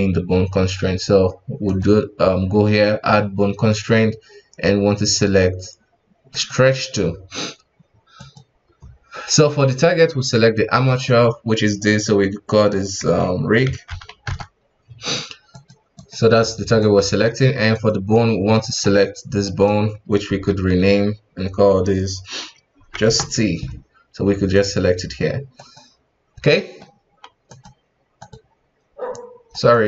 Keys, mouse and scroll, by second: 1.6-4.7 drag, 8.1-10.8 drag, 11.0-14.0 drag, 15.5 click, 15.9-18.7 drag, 19.4 right click, 20.3 F2, 24.5 click, 24.9-26.5 drag, 26.5-27.5 middle drag, 27.5-29.5 drag, 29.5 right click.